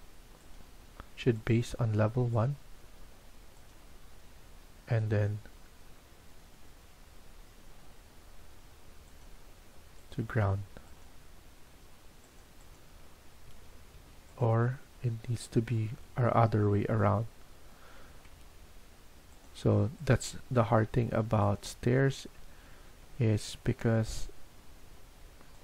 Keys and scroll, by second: 7.3 Escape, 13.4 Escape, 13.8 Escape, 18.1 Escape, 18.4 Escape, 23.2 Escape, 23.5 Escape.